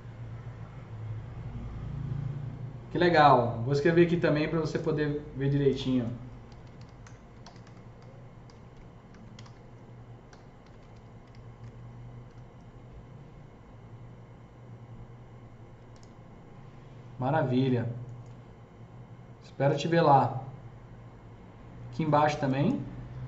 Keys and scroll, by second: 6.2-12.1 typing.